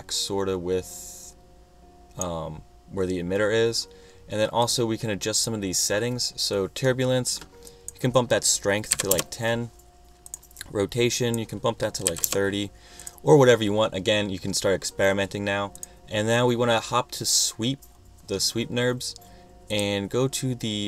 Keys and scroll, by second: 8.7-9.7 typing, 11.9-12.8 typing.